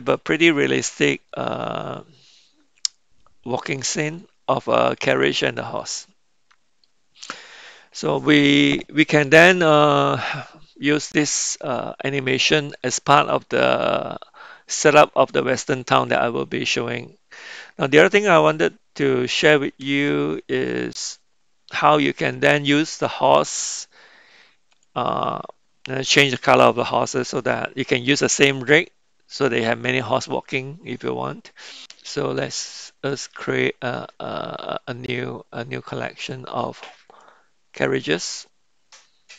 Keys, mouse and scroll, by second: 1.3-5.8 middle drag, 6.0-6.8 middle drag, 15.4-22.3 middle drag, 23.2 click, 24.7 click, 33.1-37.4 drag.